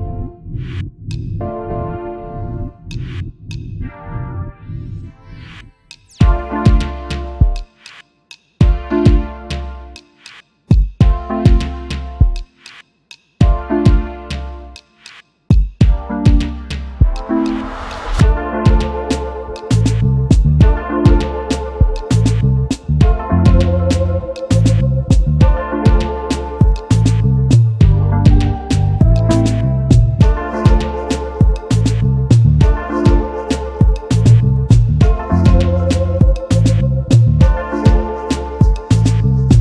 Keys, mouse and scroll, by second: 0.1 alt+scroll up 1, 1.2 shift+click, 6.5 space, 8.6 alt+shift+click, 12.7 alt+click, 15.9-16.3 alt+scroll up 1, 18.0 alt+click, 19.1-19.7 alt+scroll up 1, 20.6 alt+scroll down 1, 21.5 alt+scroll up 1, 21.6 alt+click, 21.7 double click, 22.1 space, 22.4 space, 27.0 ctrl+g, 28.4 space, 28.4 double click, 28.7 space, 31.1 alt+shift+click, 35.3 alt+scroll down 1, 36.6 space, 37.7-38.7 alt+scroll up 1.